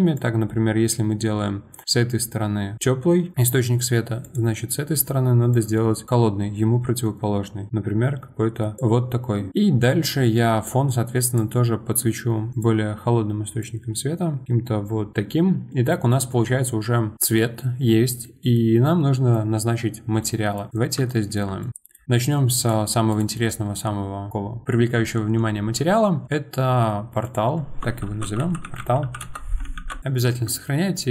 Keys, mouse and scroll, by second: 4.2 click, 5.5 click, 9.5-11.2 middle drag, 11.2 click, 12.5 click, 13.6 click, 15.8-19.8 middle drag, 19.8-20.2 scroll up 1, 20.2-20.7 middle drag, 20.7 click, 21.1-22.6 shift+middle drag, 22.6 click, 23.1 click, 26.2-29.8 drag, 29.8 ctrl+shift+s.